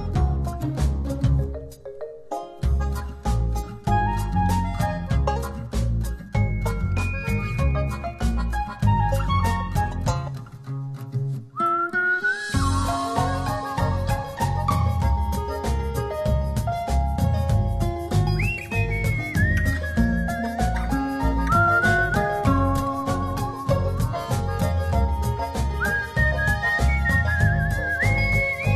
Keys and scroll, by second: 13.4 shift+Up, 16.7 shift+Down, 18.9 shift+Up, 21.1 Up, 24.8 shift+Right, 27.2 Up, 28.1 shift+Up.